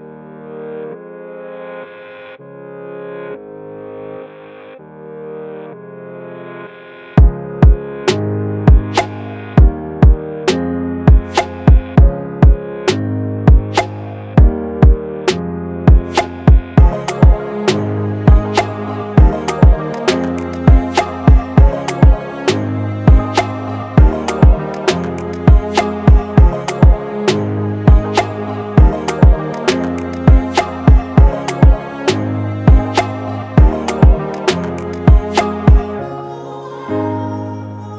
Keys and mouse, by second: 0.5-3.0 alt+drag, 3.3-6.4 alt+drag, 6.5-11.6 drag, 14.2 right click, 16.2 click, 16.2 click, 17.6 click, 19.3-25.5 drag, 27.1 shift+click, 30.6 click, 36.3-37.9 drag.